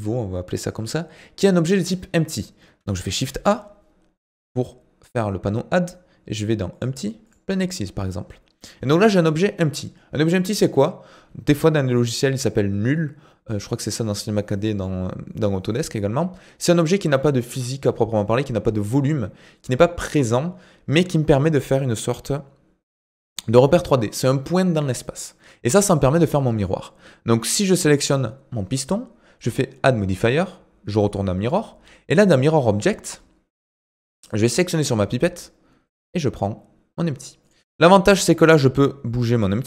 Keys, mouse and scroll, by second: 3.1 shift+a, 8.0-11.1 scroll up 2, 26.6 click, 29.4-32.4 drag, 34.3 click, 37.4 click, 38.0-38.7 scroll down 2, 38.7 g.